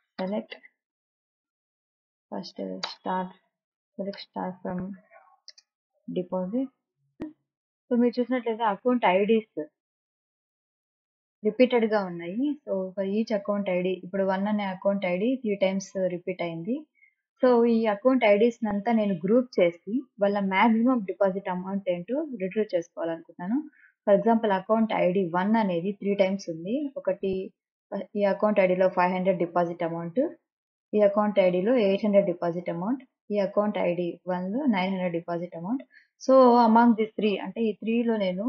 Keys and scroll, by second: 0.0-0.5 typing, 2.6 shift+8, 2.8 space, 3.2 d, 4.2-7.2 typing.